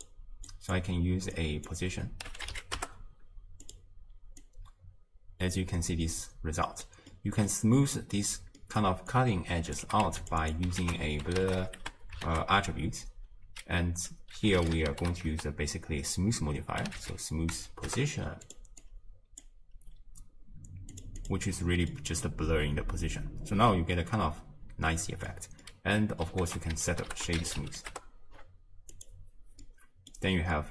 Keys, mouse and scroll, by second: 0.5-1.7 drag, 4.5-9.8 drag, 10.4-17.9 drag, 19.5 click, 21.1-23.2 drag, 23.2-27.9 middle drag, 27.9 ctrl+a.